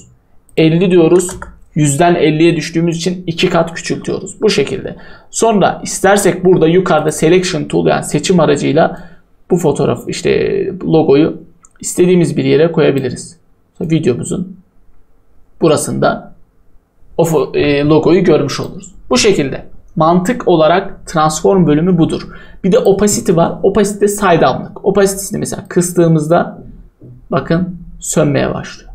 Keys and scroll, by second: 0.8-1.6 typing.